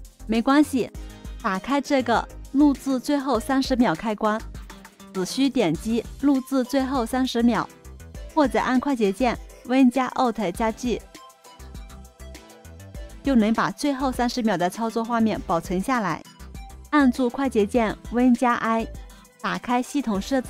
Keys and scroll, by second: 9.6 alt+super+g, 18.1 super+i.